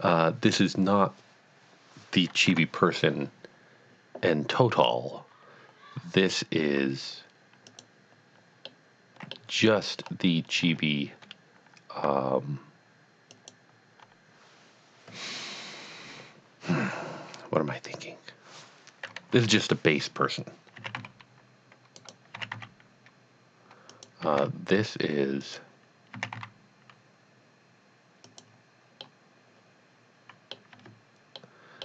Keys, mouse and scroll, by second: 2.5 KP_1, 7.7 click, 8.7 middle click, 10.0-10.3 scroll up 1, 11.6 Tab, 13.3 alt+click, 19.4 KP_1, 20.8 s, 21.1 z, 22.0 right click, 22.3 s, 23.0 z, 23.9 click, 24.3 g, 24.9 z, 25.5 click, 26.2 s, 28.3 click, 29.0 middle click, 29.7 middle click, 30.9 Tab, 31.6 middle click.